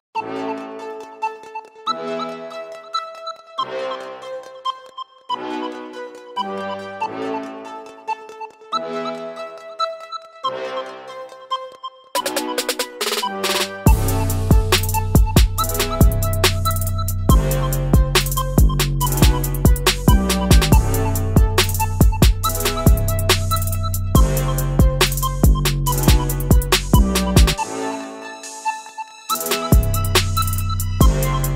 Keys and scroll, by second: 0.1 Down, 0.1 Up, 0.2 Up, 0.3 Up, 0.5 Down, 0.6 Down, 11.7 Down, 11.7 Down, 11.8 Down, 12.1-15.5 Down, 15.6 Down, 15.7 Down, 15.8 Down, 16.0 Down, 16.1 Down, 16.2 Down, 16.3 Down, 16.4 Down, 16.6 Up, 16.8 Down, 16.9 Down, 17.1-18.2 Down, 18.4 Up, 18.5 Up, 18.7 Down, 18.9 Down, 19.0 Down, 19.2-19.8 Down, 20.0 Down, 20.1 Down, 20.3 Down, 20.4-21.3 Down, 21.5 Up, 21.6 Up, 21.7 Up, 23.5-24.5 Down, 24.9-25.7 Down, 26.2 Down, 26.3 Down, 26.4-28.1 Down, 28.6 Up, 28.8 Up, 28.8-31.5 Down, 29.4 Up, 30.6 Up, 30.7 Up, 30.7 Up.